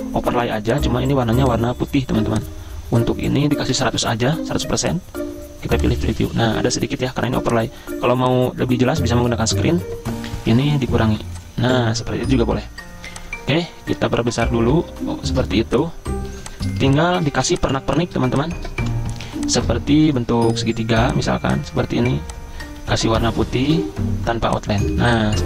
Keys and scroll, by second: 3.5-4.5 typing, 6.0-6.8 typing, 10.1-10.9 typing, 16.4-20.1 typing, 22.8 d, 23.4 ctrl+shift+], 23.7 v, 24.9 z.